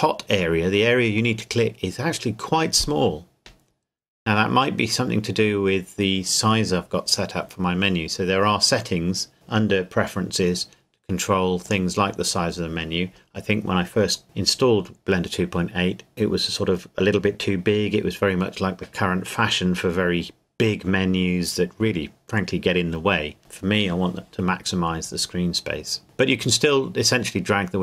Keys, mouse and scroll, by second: 9.3 click, 11.6 click.